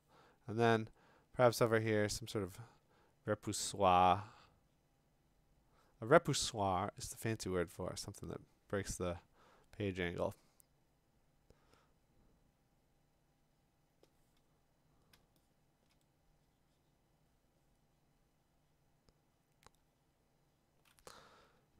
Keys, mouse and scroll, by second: 15.8 click, 21.3-21.7 ].